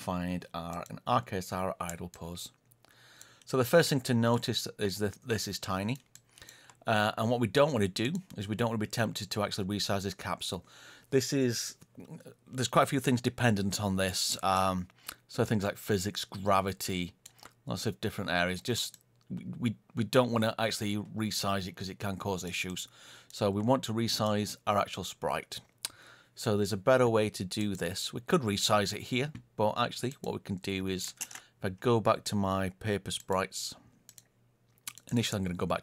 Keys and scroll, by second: 31.1 ctrl+space.